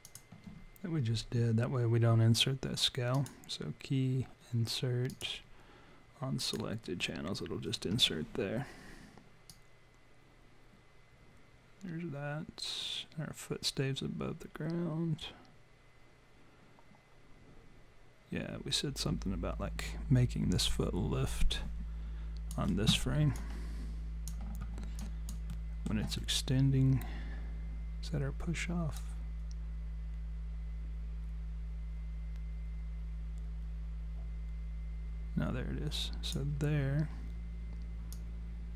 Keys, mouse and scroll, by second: 3.2 click, 9.5 click, 23.4 alt+click, 25.0 alt+click, 25.5 alt+middle click, 29.0 click, 38.2 click.